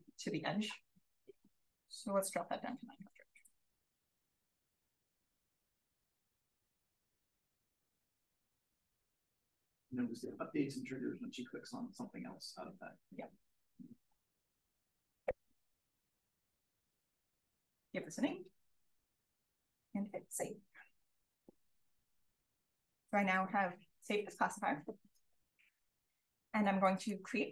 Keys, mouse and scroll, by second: 0.0-2.4 scroll up 1, 2.2-3.1 typing, 2.4-3.8 scroll up 1, 3.8-4.7 scroll up 1, 5.3 click, 5.8-6.2 scroll up 1, 6.2 drag, 6.5-9.0 scroll up 2, 15.3 shift+c, 15.8 o, 16.5 n, 21.6 click, 25.6 click, 26.8 click.